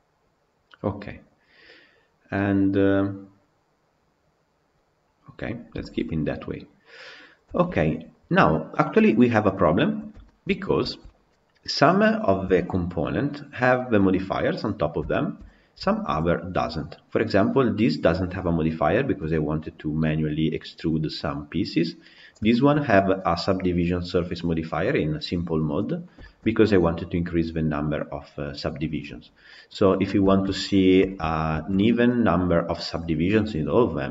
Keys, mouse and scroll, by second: 5.5 scroll down 1, 5.6-7.0 shift+middle drag, 7.0 scroll up 2, 7.4-9.7 shift+middle drag, 9.7-10.1 scroll down 3, 10.1 shift+middle drag, 10.7-11.6 shift+middle drag, 11.6 click, 12.3 KP_Decimal, 12.9-14.5 scroll down 1, 14.5 scroll down 5, 14.8 scroll up 1, 14.9-16.0 shift+middle drag, 16.0-16.5 scroll down 1, 16.5 click, 22.1 click, 22.3-25.7 shift+middle drag, 25.7 scroll up 2, 26.0-29.1 shift+middle drag, 29.1-29.7 scroll down 4, 29.7-30.1 scroll up 1, 30.1-34.1 shift+middle drag.